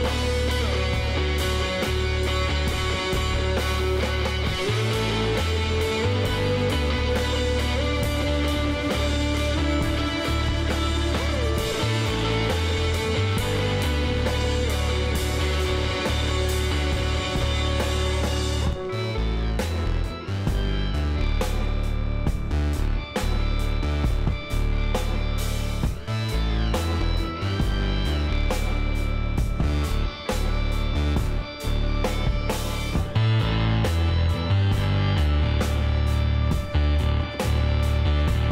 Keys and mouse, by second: 4.6 ctrl+z, 5.7 click, 7.9 x, 9.3 Tab, 11.4 alt+h, 12.1 click, 12.6-14.1 middle drag, 12.9 Tab, 14.2 KP_1, 23.6 z, 25.8 z, 26.4-28.3 middle drag, 26.9 a, 28.3 e, 34.4-36.6 middle drag.